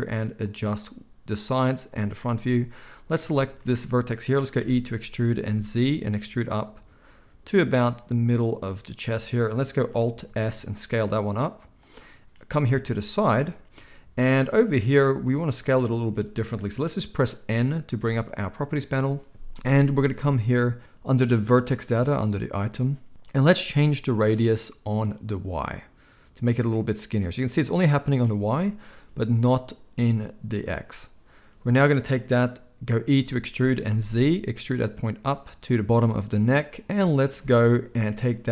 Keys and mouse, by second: 0.6-2.8 middle drag, 2.8-8.4 drag, 4.6 e, 8.4-25.0 middle drag, 10.2 ctrl+a, 18.0 n, 25.0-35.8 drag, 33.0 e, 35.8-38.5 middle drag.